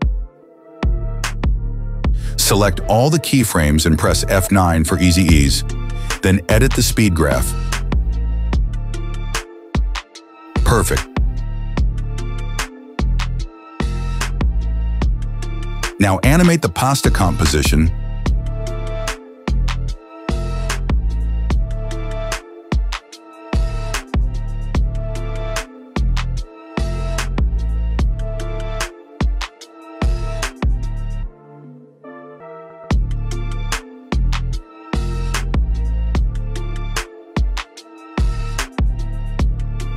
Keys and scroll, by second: 0.4 space, 1.7 space, 4.4 F9, 11.5 space, 22.1 p, 34.0 space, 38.7 shift+s.